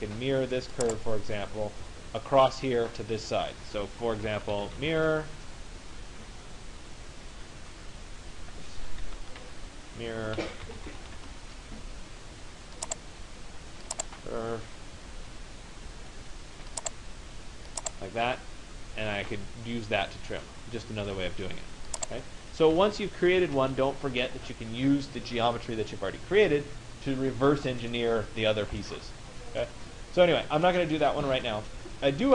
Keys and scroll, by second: 4.7 Return, 9.0 Escape, 11.1 Return, 23.2 Return.